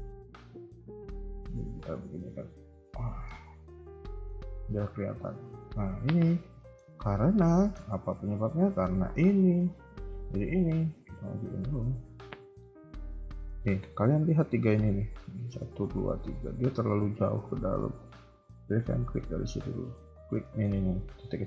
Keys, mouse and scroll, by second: 0.4 KP_3, 0.9 KP_1, 1.3 Tab, 2.6 click, 3.1 scroll up 3, 3.2 Tab, 3.8 middle click, 4.3 KP_3, 5.4 KP_1, 6.5 middle click, 6.8 KP_3, 7.1 scroll up 2, 7.4 shift+middle click, 8.6 KP_1, 10.1 click, 10.5 scroll down 1, 11.5 ctrl+click, 11.5 scroll down 2, 11.7 KP_3, 12.2 shift+middle click, 13.5 shift+middle click, 13.9-14.5 scroll up 2, 14.7 a, 14.9 a, 17.2 click, 18.9 a, 20.1 click, 20.1 a, 20.4 shift+middle click, 20.7-21.4 scroll up 1.